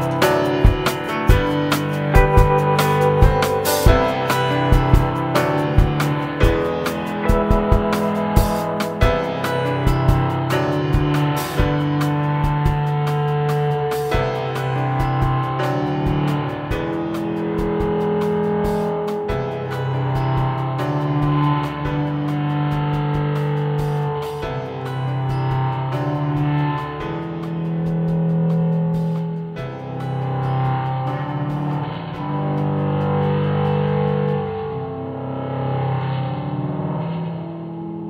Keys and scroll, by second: 0.1 5, 0.7 Return, 20.0 Delete, 21.1 Delete, 24.1-25.9 typing, 29.4 m, 29.7 i, 29.9 e, 32.5-33.3 typing, 35.7-38.0 typing.